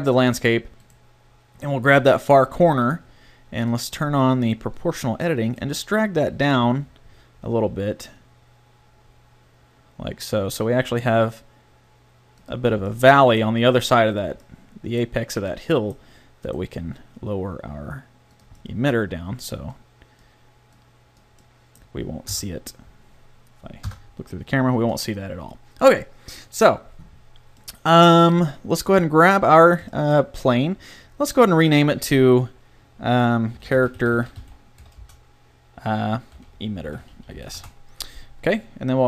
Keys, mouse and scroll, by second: 5.7 g, 12.7 Tab, 16.8 g, 18.6-20.0 middle drag, 20.3 middle click, 22.3 KP_0, 23.9 KP_0, 24.4 a, 28.9-31.7 middle drag, 37.2 t.